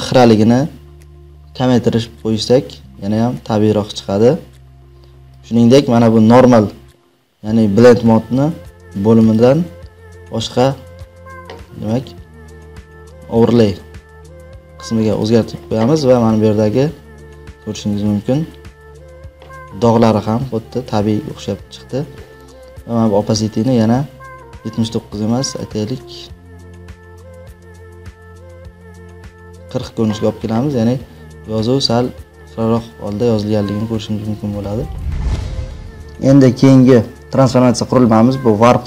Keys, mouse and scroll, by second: 9.2 click, 15.3 click, 16.3-16.7 alt+scroll, 17.4-17.9 alt+scroll, 18.4-18.8 alt+scroll, 20.2-20.8 alt+scroll, 21.8 alt+scroll, 29.4 click.